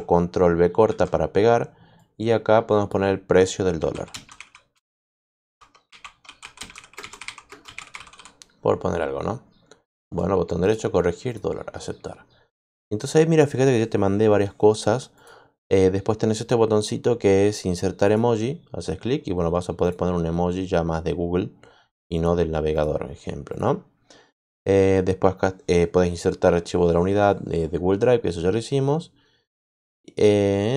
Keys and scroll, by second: 0.8 ctrl+v, 3.3-8.6 typing.